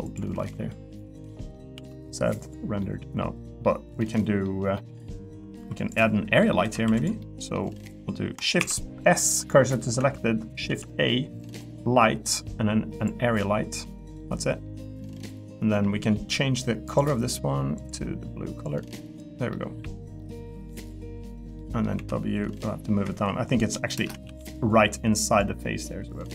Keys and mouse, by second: 0.3 Tab, 0.7 middle click, 1.2 middle click, 1.7 z, 2.8 middle click, 3.4 middle click, 4.0 middle click, 4.7 middle click, 5.6 3, 5.8 click, 6.4 middle click, 6.6 Tab, 6.8 3, 7.2 middle click, 8.6 shift+s, 10.0 Tab, 10.7 shift+a, 14.2 middle click, 16.9 click, 17.8 click, 19.5 middle click, 20.2 middle click, 20.6 middle click, 21.6 middle click, 21.9 w, 23.0 Escape, 23.9 shift+space.